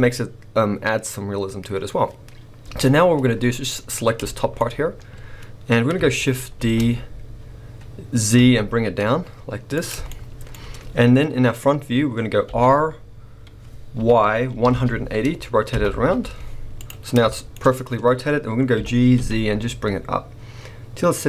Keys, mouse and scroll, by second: 2.6 KP_1, 3.8 click, 4.2 shift+middle click, 4.6 scroll up 1, 6.6 shift+d, 9.9 click, 10.0-16.8 shift+middle drag, 10.6-12.0 scroll up 2, 12.0-12.4 scroll up 1, 12.4 r, 16.8 click, 17.0 scroll down 2, 17.3-18.7 shift+middle drag, 17.6-18.7 shift+scroll up 1, 18.7 g.